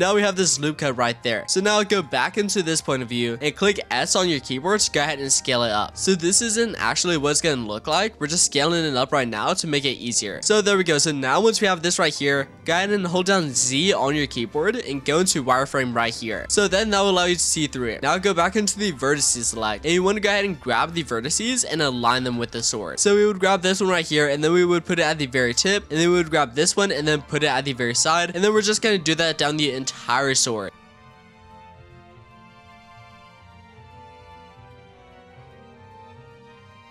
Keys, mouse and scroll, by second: 1.8 click, 2.5-3.4 scroll down 4, 3.4-3.7 scroll up 2, 3.7 shift+middle click, 4.6 s, 10.1 shift+middle click, 10.5-11.5 scroll down 2, 11.5-13.6 scroll up 7, 13.6 z, 16.5-17.6 shift+middle drag, 17.6-18.7 scroll up 2, 18.7-20.1 drag, 20.5-21.1 shift+middle drag, 21.1-21.5 scroll up 4, 21.6-23.7 shift+middle drag, 23.7 g, 25.8 click, 26.5 g, 28.1 click, 28.3-30.6 scroll down 7, 30.6-36.9 typing, 30.7 click, 31.0 click, 31.4 scroll down 7, 31.5 shift+middle click, 31.7 scroll up 8, 31.7 shift+middle click, 31.9 click, 32.1 click, 32.3 shift+middle click, 32.4 scroll up 1, 32.5 click, 32.9 click, 33.1 shift+middle click, 33.2 click, 33.4 click, 33.4 scroll down 4, 33.5 shift+middle click, 33.5 scroll up 2, 33.9 click, 34.1 click, 34.1 shift+middle click, 34.4 click, 34.7 click, 35.0 shift+middle click, 35.1 click, 35.7 click, 35.9 click, 36.0 shift+middle click, 36.1 scroll up 2, 36.4 click.